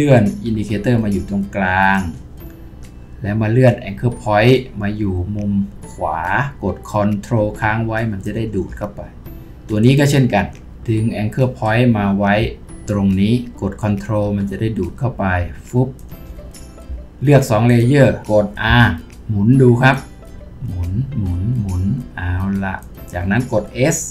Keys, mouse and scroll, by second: 17.7 shift+click, 18.7 r, 19.1-19.7 scroll down 1.